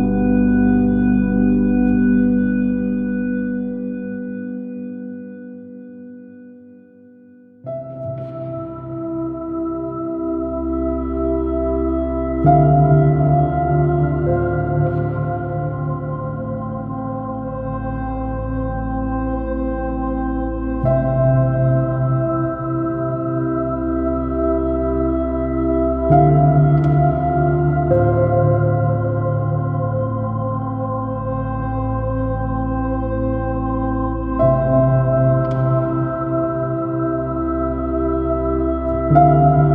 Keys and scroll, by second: 0.0 super+-, 5.4 super+z, 7.0 super+d, 7.3 super+b, 7.4 space, 11.8 alt+super+z, 13.3 alt+super+z, 14.8 space, 17.4 space, 18.2 space, 20.4 space, 23.4 space, 24.8 space, 25.7 space, 26.3 space, 26.8 x, 28.6 super+z, 32.4 super+i, 33.2 space, 33.6 x, 33.8 super+z, 34.5 super+z, 36.5 super++, 36.6 super+space, 39.0 super+-, 39.2 super++, 39.4 x.